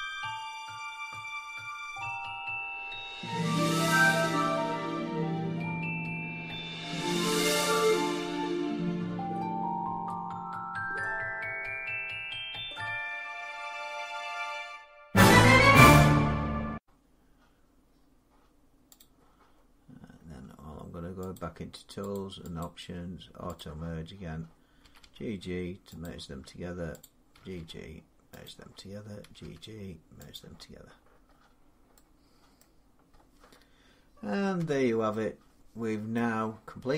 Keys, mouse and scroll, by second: 0.0 middle click, 0.0 click, 0.3 click, 0.4 middle click, 0.6 click, 0.7-5.5 typing, 1.0 click, 1.1 click, 1.4 click, 1.5 click, 1.9 click, 2.0 click, 2.4 click, 2.7 click, 3.3 click, 3.5 click, 3.7 click, 4.0 click, 4.2 click, 4.6 click, 5.1 click, 5.3 click, 5.5 click, 5.8 click, 6.2 click, 6.3 middle click, 6.5 middle click, 6.5 click, 6.7 click, 6.9-16.6 typing, 7.2 click, 7.3 click, 7.7 click, 7.9 click, 8.4 click, 8.7 scroll, 8.9 click, 9.2 click, 9.3 click, 9.7 click, 10.2 click, 10.5 click, 10.5 scroll, 10.8 click, 11.0 click, 11.2 click, 11.8 click, 11.9 click, 12.1 click, 12.2 scroll, 12.4 click, 12.6 middle click, 12.8 click, 12.9 click, 13.0 click, 13.2 click, 13.6 click, 13.9 click, 14.3 shift+middle click, 14.4 scroll, 14.5 click, 14.9 click, 15.0 click, 15.3 click, 15.7 click, 16.0 click, 16.4 click, 16.6 click, 18.8 click, 21.1 click, 21.9 click, 22.4 click, 23.4 click, 24.6 g, 24.8 g, 25.8 click, 27.2 click, 27.2 g, 27.4 g, 28.2 click, 29.0 g, 29.2 g, 30.1 click, 30.8-31.3 scroll, 31.7 scroll down 9, 32.4 middle click, 32.9-34.4 scroll down 2, 34.4 Tab, 35.9 middle click.